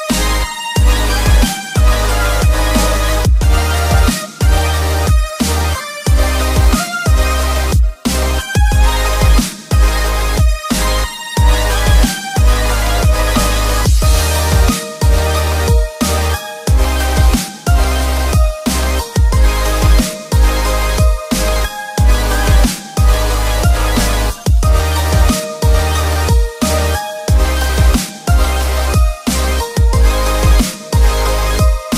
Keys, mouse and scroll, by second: 0.3 click, 1.2 click, 2.3 click, 2.3 right click, 2.8-3.9 scroll up 2, 3.9-5.5 middle drag, 7.2 alt+s, 9.4 click, 10.7-13.3 drag, 13.9-15.6 middle drag, 16.9 ctrl+i, 18.2 alt+s, 20.8 click, 21.7-23.7 drag, 24.9 click, 25.4-25.8 scroll down 1, 25.8-30.7 middle drag, 31.2-31.6 scroll up 1, 31.6 shift+middle click.